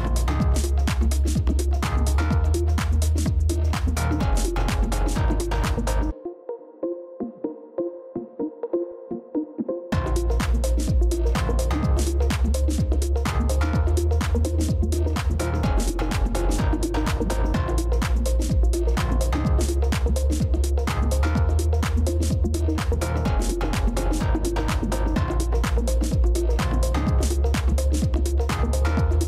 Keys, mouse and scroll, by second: 6.4 double click, 13.6 ctrl+-.